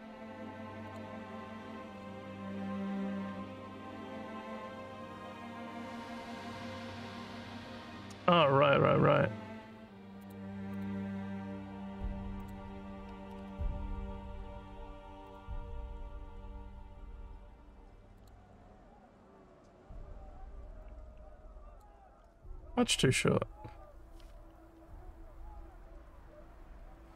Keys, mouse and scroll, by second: 0.9 click, 3.5 click, 8.4 scroll down 1, 10.2 click, 10.7 click, 12.4 click, 15.3 click, 18.2 click, 20.8-21.8 drag.